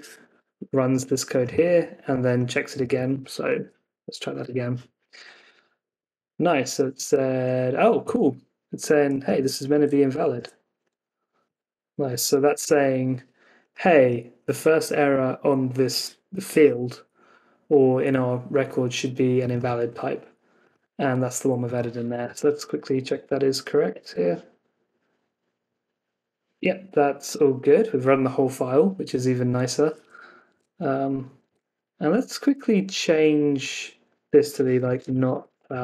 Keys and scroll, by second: 3.5 super+Tab, 4.0 Up, 4.4 Return, 9.6 super+c, 10.3 super+Tab, 12.3 super+v, 12.5 super+s, 22.2 super+Tab, 22.8 Down, 23.0 Up, 23.8 Return, 30.4 super+Tab, 32.8 super+Tab.